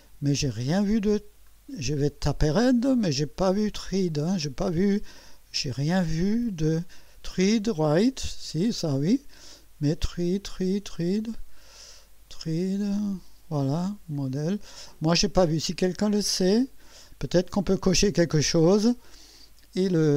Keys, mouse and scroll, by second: 1.5 scroll down 2, 2.9 scroll down 1, 3.9 scroll down 2, 4.8-5.1 scroll down 2, 5.6 scroll up 2, 9.4-9.7 scroll up 2, 12.9 scroll up 2, 15.6-17.3 drag.